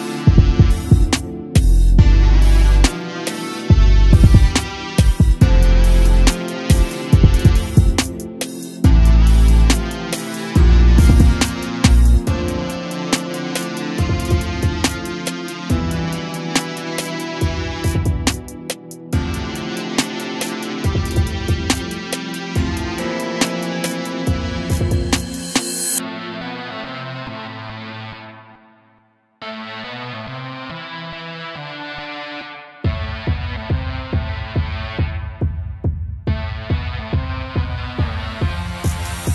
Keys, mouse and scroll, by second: 0.0 a, 0.4 click, 1.4 r, 4.1 a, 4.2 click, 4.6 s, 6.3 a, 6.4-6.7 scroll down 2, 7.4-7.8 scroll down 8, 7.8-8.4 shift+middle drag, 8.4-9.9 scroll up 1, 9.9-10.2 shift+middle drag, 10.2-10.7 scroll up 1, 10.7 click, 11.1 shift+click, 11.6 shift+click, 12.1 shift+click, 12.5 shift+click, 13.0 shift+click, 13.5 shift+click, 14.2 s, 16.2 g, 17.2 a, 17.3-17.8 scroll up 1, 17.8-18.3 shift+middle drag, 18.3-18.6 scroll down 3, 18.9-19.4 scroll down 7, 19.4-20.2 shift+middle drag, 20.2-21.4 scroll up 2, 21.4-21.9 shift+middle drag, 21.9-23.1 scroll up 2, 23.4 click, 24.7 shift+d, 26.6 KP_7, 27.3-27.6 scroll down 2, 27.9 g, 28.6 ctrl+click, 29.0 KP_1, 29.6-30.1 scroll up 1, 30.1 g, 31.6-32.4 middle drag, 32.4-33.1 scroll up 4, 33.1-33.7 middle drag, 33.7-34.2 scroll up 1, 34.2-34.6 scroll down 1, 34.6 g, 36.6 a, 37.2 click, 38.3 click, 38.9 scroll up 2, 39.2 3.